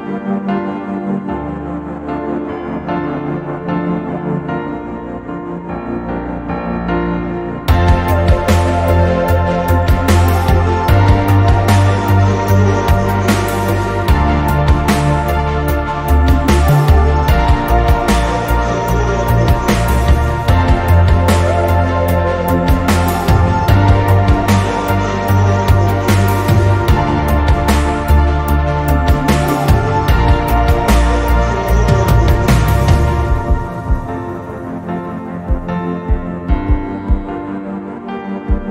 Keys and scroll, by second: 7.4 z.